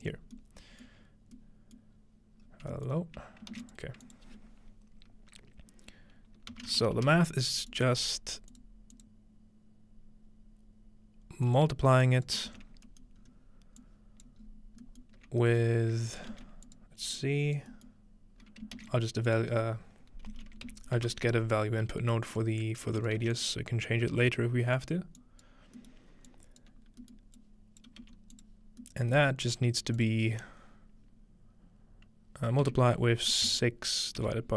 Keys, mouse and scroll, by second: 0.2 scroll down 2, 2.0-3.2 scroll down 4, 3.2 scroll up 2, 3.5 shift+a, 3.7 click, 6.4-7.3 typing, 7.7 click, 8.5 click, 8.9-10.9 drag, 11.4-17.6 drag, 12.5 typing, 12.7 scroll down 1, 12.9-13.3 scroll up 2, 12.9 ctrl+middle click, 14.3-17.2 scroll up 1, 16.3 shift+d, 17.7-19.9 scroll up 1, 18.8 shift+a, 19.3 click, 20.3-21.5 typing, 22.3 click, 23.0 click, 23.2 1, 23.3 click, 23.9-24.8 drag, 25.2 click, 26.3 click, 26.9 scroll down 1, 27.4-32.3 drag, 28.0-28.7 scroll down 2, 28.0 typing, 29.3-30.7 scroll down 1, 30.7-32.3 scroll down 1, 32.6 typing.